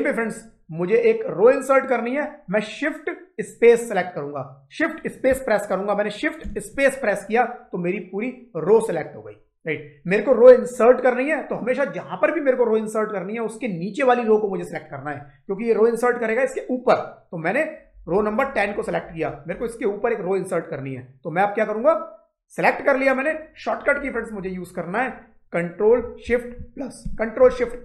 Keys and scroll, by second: 6.3 shift+space, 26.9 ctrl+shift+=.